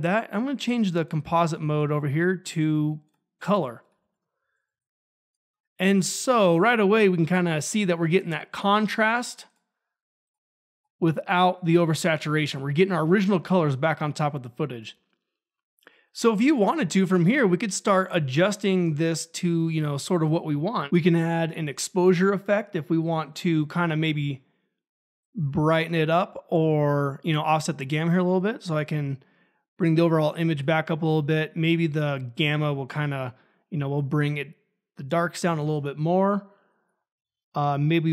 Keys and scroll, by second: 4.0 ctrl+a, 4.7 ctrl+`, 20.6-22.1 typing, 37.9-38.1 typing.